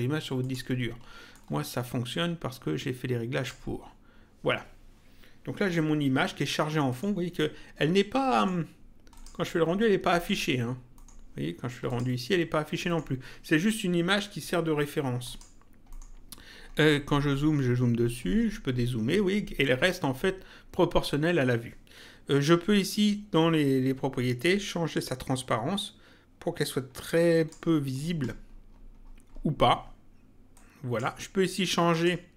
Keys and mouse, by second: 0.4 click, 6.9 middle click, 8.4 middle click, 9.2 click, 10.2 middle click, 12.9 middle click, 15.2 click, 15.9 middle click, 24.6 click, 30.5 click, 31.9 click.